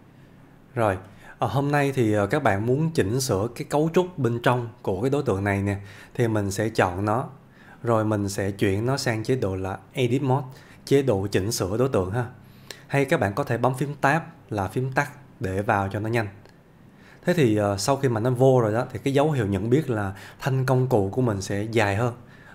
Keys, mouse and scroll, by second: 0.0-0.6 scroll down 1, 1.3-2.0 scroll down 1, 2.0-2.6 middle click, 8.4 click.